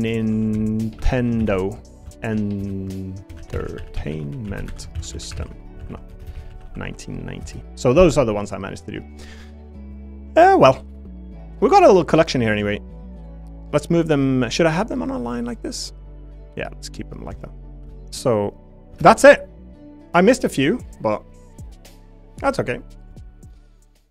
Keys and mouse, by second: 6.2 BackSpace, 6.8 9, 10.0 middle click, 11.5 middle click, 12.7 shift+click, 15.2-16.9 middle drag, 17.3 shift+middle click, 17.9 middle click, 19.0 shift+space, 20.5 click, 20.8 click.